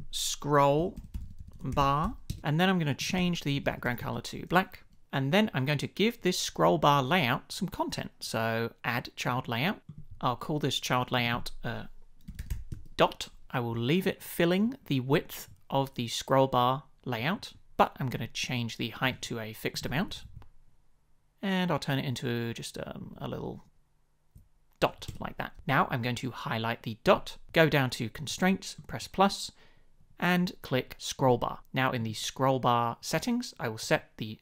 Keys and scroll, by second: 0.6-3.1 typing, 4.0 Return, 12.0-13.0 typing, 20.1 shift+Down, 25.0 Return.